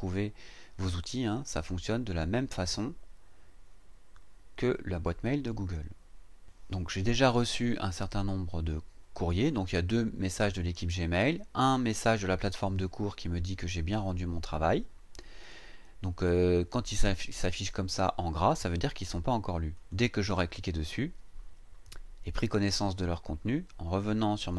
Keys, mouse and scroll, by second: 19.8 click, 24.4 click.